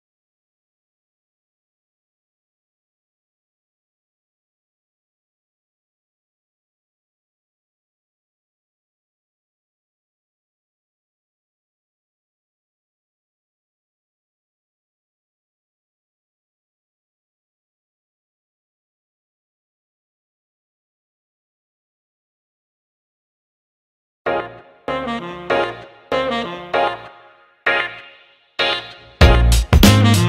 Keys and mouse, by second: 1.0-4.9 drag, 5.7 g, 8.5 click, 9.4 g, 12.2 click, 13.2 g, 16.0 click, 17.0 g, 19.7 click, 20.7 ctrl+x, 21.9 click, 22.9 ctrl+x, 26.2 click, 27.4 ctrl+x, 28.5 click, 29.5 ctrl+x.